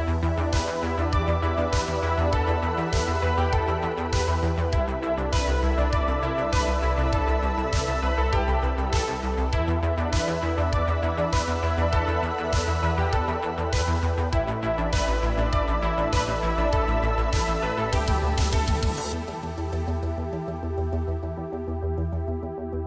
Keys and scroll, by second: 3.3 Tab, 6.9 g, 8.7 g, 11.1 g, 13.1 g, 14.8 g, 16.8 Tab, 19.9 ctrl+a.